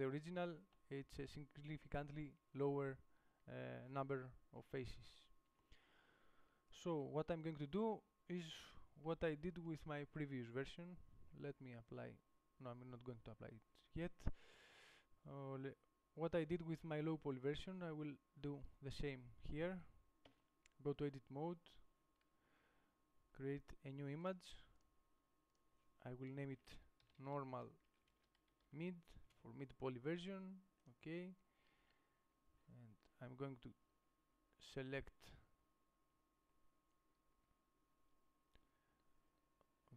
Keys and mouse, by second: 0.4 Tab, 4.8 KP_7, 20.5 Tab, 32.0 a.